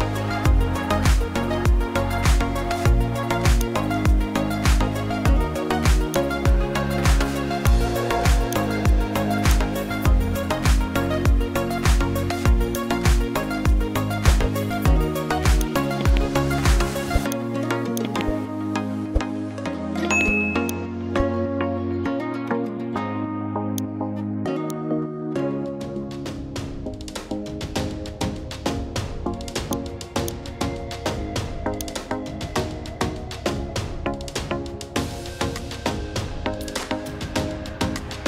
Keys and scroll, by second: 3.9 1, 35.1 1, 37.2 1.